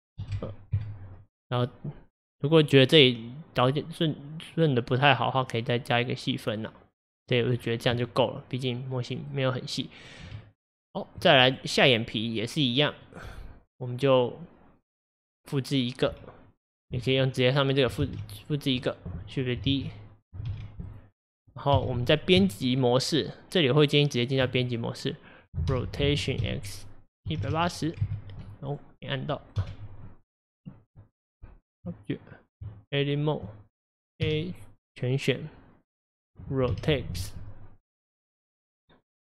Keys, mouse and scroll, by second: 2.7-4.6 middle drag, 4.6 click, 6.0-7.6 drag, 7.6-8.0 scroll down 6, 8.0-10.1 middle drag, 10.1 click, 10.4 Tab, 11.5 click, 11.9-15.0 middle drag, 18.1 shift+d, 19.8 ctrl+z, 20.6 shift+d, 21.8 KP_1, 22.5 Tab, 25.8 r, 26.5 x, 27.5 KP_8, 27.6 KP_0, 28.1 KP_Enter, 28.8 click, 29.0-29.7 scroll up 3, 29.7 KP_1, 30.6 click, 31.0 Tab, 32.7 Tab, 34.3 a, 36.8 r.